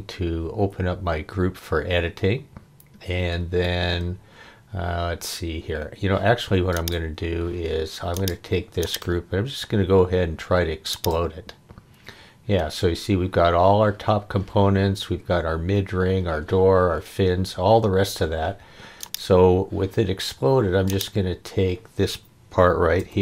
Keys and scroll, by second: 23.0 m.